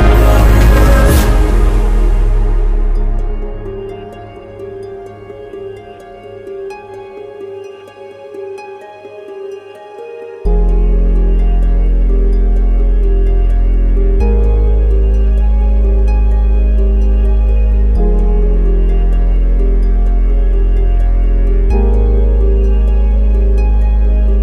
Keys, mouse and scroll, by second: 2.1 click, 7.1 click, 11.1 right click, 13.0-22.6 drag.